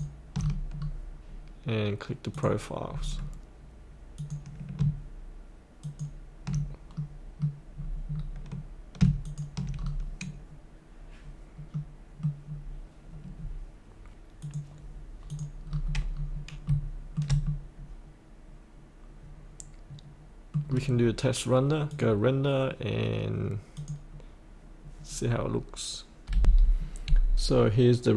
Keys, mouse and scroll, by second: 0.4-0.7 scroll up 1, 2.3 click, 2.8-4.1 scroll down 1, 4.1 click, 5.8 ctrl+click, 6.4 ctrl+scroll up 2, 6.9 middle click, 7.7 scroll down 1, 9.2 ctrl+click, 9.7-11.7 scroll up 1, 11.7 middle click, 12.4 scroll down 1, 14.4 click, 15.7-16.1 scroll up 1, 16.7 middle click, 17.4-20.8 middle drag, 20.8 scroll down 1, 21.9-24.8 drag, 26.4 F8.